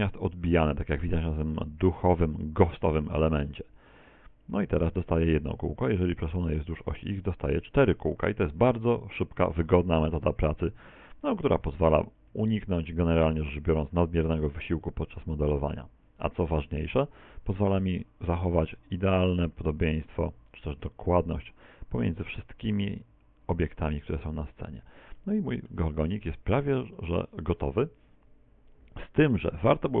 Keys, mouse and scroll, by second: 0.6 middle click, 3.6 click, 6.3 click, 8.4 KP_1, 10.1 click, 17.2 KP_1, 17.4 KP_3, 19.4 click, 24.1-24.9 scroll down 2, 24.9-25.2 scroll down 1, 24.9 z, 25.2 middle click, 25.9 middle click, 26.6-27.0 scroll down 2, 27.0 shift+middle click, 27.5 shift+middle click.